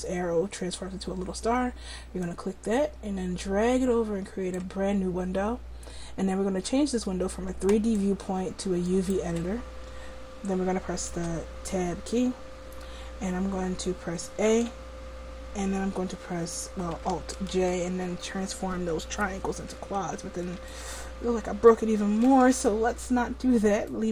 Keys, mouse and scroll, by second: 2.3-4.2 drag, 7.8-9.8 drag, 11.8 Tab, 15.0 a, 18.7 alt+j, 22.8 ctrl+z.